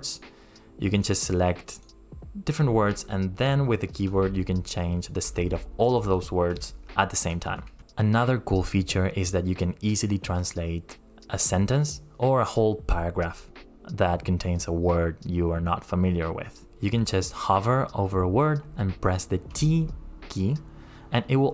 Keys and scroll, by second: 19.5 t.